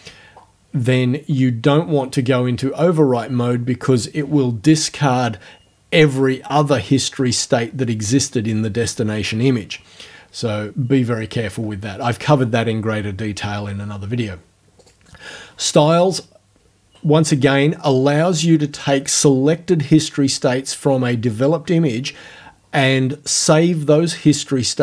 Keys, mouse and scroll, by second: 2.0 scroll down 2, 11.4 scroll up 2, 14.8 click.